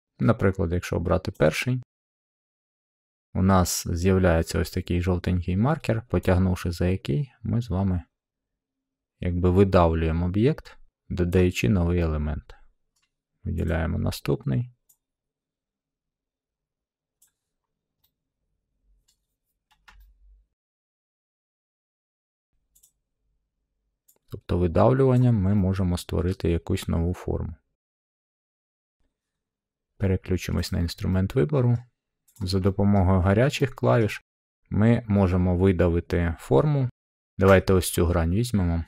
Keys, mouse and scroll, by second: 1.3-2.4 drag, 3.1-4.3 middle drag, 11.3-12.4 drag, 12.9 middle click, 13.6 click, 17.2 click, 17.6 middle click, 17.7 middle click, 17.9 scroll, 19.0 middle click, 20.6 shift+middle click, 21.4 shift+middle click, 22.3 middle click, 22.5 scroll, 22.8 click, 25.1 click, 26.1 click, 28.2 middle click, 30.6-31.7 drag, 31.7 middle click, 31.9-32.3 scroll, 32.3 click, 32.9-33.2 scroll, 33.9 scroll, 36.9 middle click, 37.5 click.